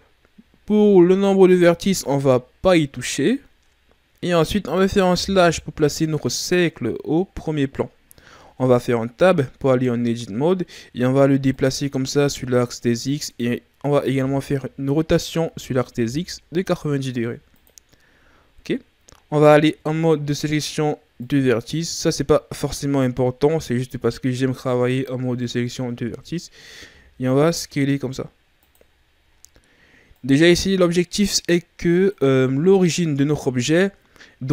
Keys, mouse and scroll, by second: 5.3 KP_Divide, 8.5 Tab, 9.6-11.5 ctrl+scroll up 4, 11.5 click, 14.1 r, 18.3-19.6 ctrl+scroll up 1, 19.6 ctrl+Tab, 26.8 s, 28.9-29.3 ctrl+scroll down 2, 29.3-30.1 scroll up 2, 30.1 click, 32.3-33.9 ctrl+scroll down 2, 33.9-34.4 ctrl+scroll down 4, 34.4-34.5 scroll up 5.